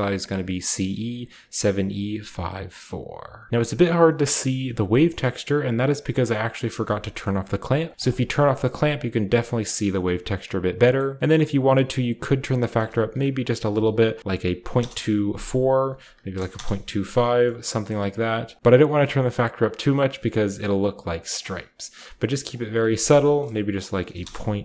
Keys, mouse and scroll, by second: 3.4 scroll down 1, 3.5 Return, 4.8 middle click, 5.5 click, 6.6 click, 7.0 scroll up 1, 7.6 click, 8.3 scroll up 1, 9.4 click, 9.4-10.5 scroll up 1, 9.7 click, 10.5-12.2 scroll down 1, 10.6-11.2 middle drag, 11.2-12.2 drag, 12.4 click, 13.5-14.4 typing, 14.5 Return, 15.4 click, 16.3 typing, 16.5 Return, 17.0-18.6 scroll down 1, 17.2-18.6 middle drag, 18.3-21.1 drag, 21.1 middle click, 21.2-24.0 drag, 22.3 middle click, 22.4 middle click, 23.8 typing, 24.0 Return.